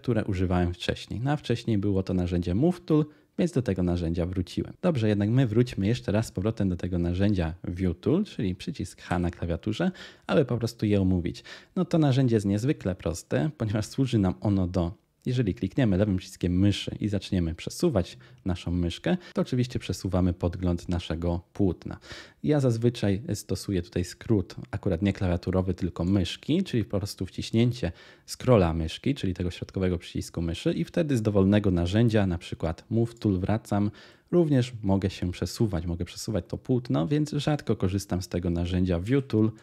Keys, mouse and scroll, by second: 9.1 h, 34.0-36.9 middle drag, 36.9-38.9 scroll, 37.1 middle click, 39.0 h.